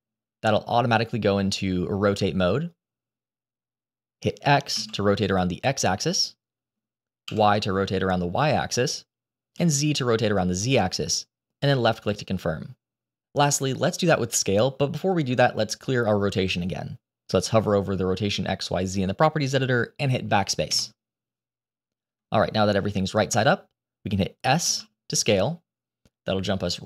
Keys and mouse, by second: 20.7 BackSpace, 24.6 s.